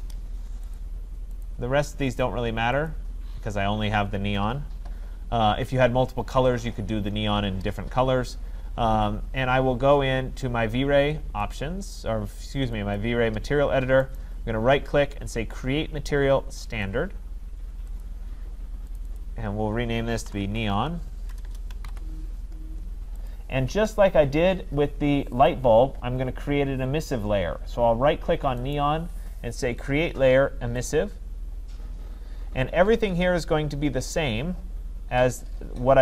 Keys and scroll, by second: 21.3 BackSpace.